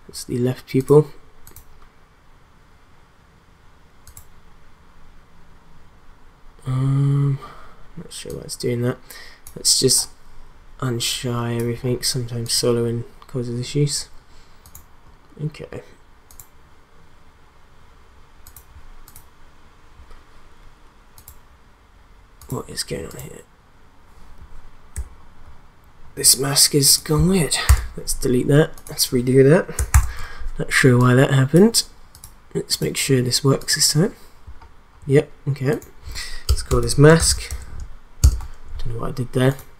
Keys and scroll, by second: 27.6 BackSpace, 29.9 ctrl+d, 36.4 Return, 36.6-38.0 typing, 38.2 Return.